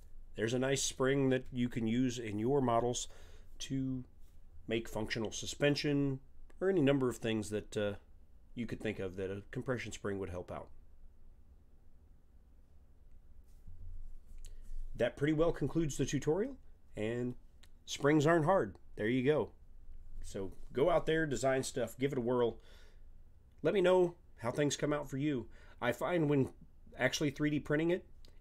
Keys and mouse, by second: 16.4-23.1 middle drag, 25.8-28.4 middle drag.